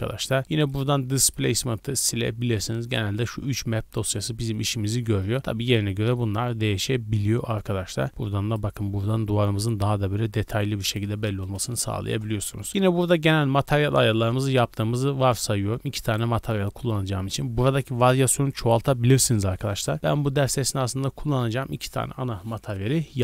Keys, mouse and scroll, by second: 0.2 middle click, 0.5 middle click, 0.8-1.2 scroll up 1, 1.2 click, 1.6 x, 1.9 click, 2.1 x, 2.4 middle click, 2.8-3.5 scroll down 2, 4.5-4.9 middle drag, 4.9 scroll up 1, 5.9 middle click, 6.1-7.1 scroll up 3, 7.1 scroll up 1, 7.3 middle click, 8.1 click, 8.8 scroll down 2, 9.3 scroll up 2, 10.8-12.1 drag, 12.7-13.3 scroll down 3, 13.7-15.0 scroll down 4, 15.1 scroll down 2, 16.0 right click, 16.5 middle click.